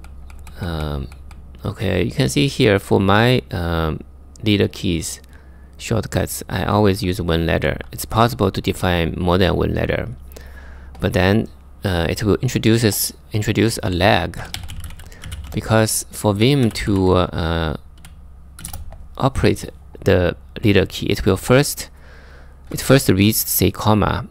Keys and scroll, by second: 0.0-0.8 typing, 6.2-7.4 typing, 13.8-15.0 typing, 16.2-16.9 typing, 18.1-18.9 typing.